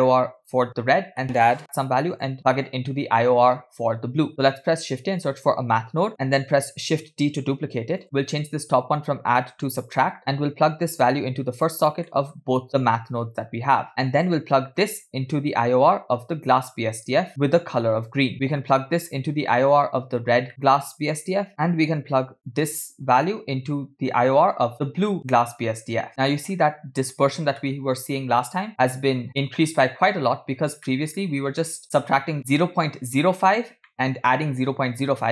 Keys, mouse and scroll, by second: 0.4 click, 1.2 middle click, 2.2 click, 4.3 middle click, 4.8 shift+a, 6.8 shift+d, 8.3-10.0 drag, 10.4-11.8 drag, 12.1 middle click, 12.7-13.9 drag, 13.9 middle click, 14.9-16.8 drag, 18.3-19.7 drag, 20.5 middle click, 22.5 click, 22.7-25.9 drag, 27.7-30.4 middle drag, 30.9 middle click, 31.8-32.3 scroll up 2, 33.9 middle click.